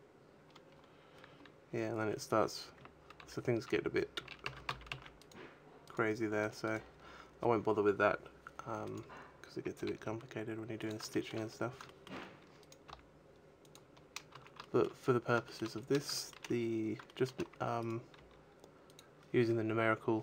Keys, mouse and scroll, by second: 0.6-1.2 scroll down 4, 1.2-3.1 scroll down 7, 1.9-3.1 scroll up 2, 3.1-4.1 scroll up 6, 5.7 right click, 6.3 right click, 6.5 right click, 7.5-8.7 scroll up 8, 8.7 right click, 9.6 g, 10.8 click, 11.0 shift+middle click, 11.3-11.6 scroll down 3, 11.7 shift+middle click, 12.5 right click, 12.7 g, 13.6 click, 14.2-14.5 scroll down 2, 14.2 a, 14.5 shift+middle click, 14.9-15.3 scroll down 1, 15.3 shift+middle click, 15.6-16.7 scroll up 8, 15.8 shift+middle click, 16.8 shift+middle click, 17.5 right click, 17.9 g, 18.8 click.